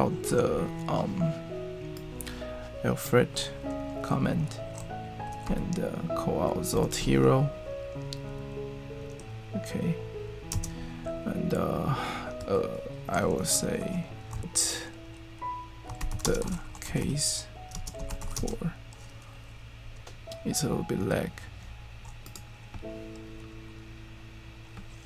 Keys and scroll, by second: 5.2-6.9 typing, 11.1 typing, 12.8-18.7 typing.